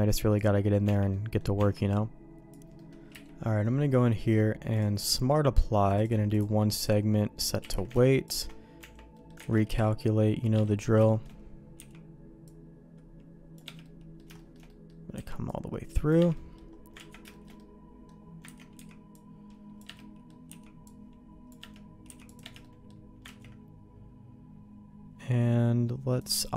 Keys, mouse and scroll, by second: 0.3 click, 0.8 Tab, 1.1 middle click, 1.6 Tab, 2.7 middle click, 3.1 q, 5.9 click, 7.1 middle click, 7.6 q, 8.8 Tab, 9.1 middle click, 9.5 alt+a, 9.7 c, 10.7 middle click, 11.0 shift+middle click, 11.8 c, 13.8 middle click, 14.3 shift+middle click, 14.7 middle click, 15.1 c, 16.3 middle click, 17.0 ctrl+q, 17.3 shift+middle click, 17.6 middle click, 18.5 ctrl+x, 18.7 c, 20.0 middle click, 20.5 c, 22.1 c, 22.6 middle click, 23.4 ctrl+q, 26.2 click.